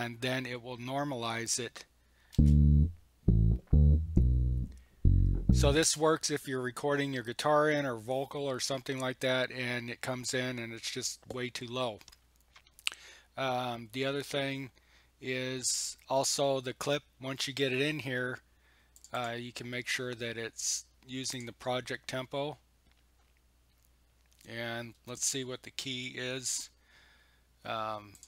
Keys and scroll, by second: 2.3 space, 5.8 space.